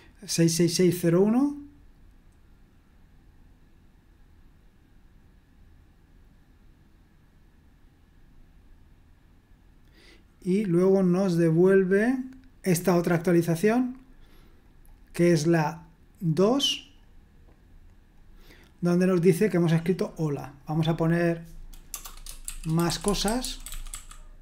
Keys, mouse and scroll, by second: 18.2-20.0 drag, 20.6-21.9 drag, 21.9-24.4 typing.